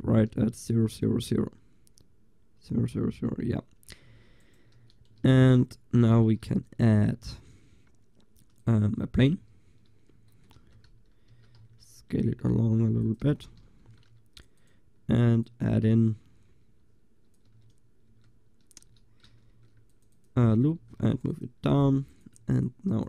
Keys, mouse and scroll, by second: 4.1 g, 4.8 a, 5.3 ctrl+s, 6.2 shift+a, 10.6 Tab, 11.4 s, 13.3 a, 13.9 ctrl+r, 17.6 Tab, 18.1 Tab, 18.9 a, 19.6 ctrl+r, 20.3-22.6 drag, 20.8 ctrl+r.